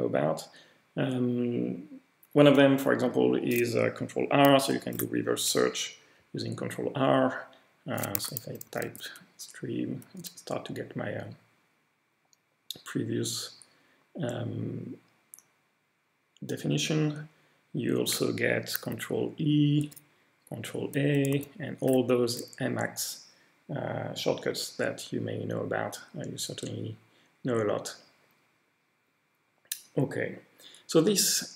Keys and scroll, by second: 4.8 ctrl+r, 8.2 s, 8.7 t, 10.7-11.4 typing, 19.8 ctrl+e, 21.3 ctrl+a.